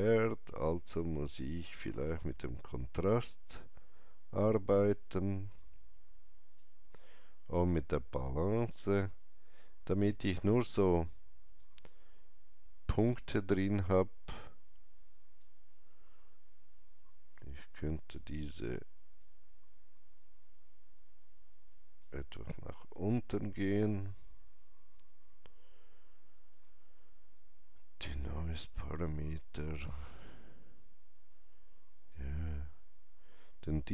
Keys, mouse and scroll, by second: 1.3-17.7 drag, 19.2-24.6 drag, 26.3-28.7 drag, 26.3 scroll down 1, 29.1-33.9 drag, 29.1 scroll down 1.